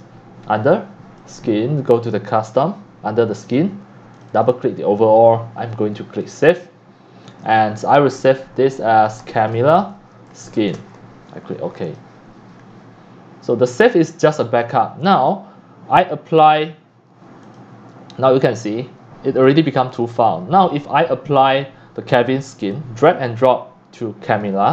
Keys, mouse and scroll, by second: 0.1-1.2 drag, 1.4 click, 1.8 click, 3.4 click, 4.1 click, 4.3 click, 6.2 click, 9.0-11.3 typing, 11.8 click, 15.2 click, 15.6 click, 16.5 click, 17.5-19.3 drag, 19.4 click, 19.9 click, 21.5-24.4 drag.